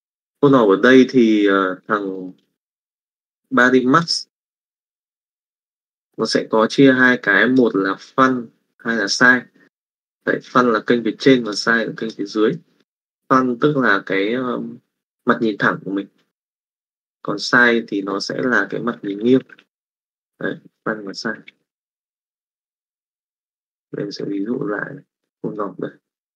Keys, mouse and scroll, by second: 3.6 click, 4.6 click, 5.2 click, 19.0 click, 19.7 middle click, 20.9 click, 21.4 click, 21.6 shift+a, 25.0 click.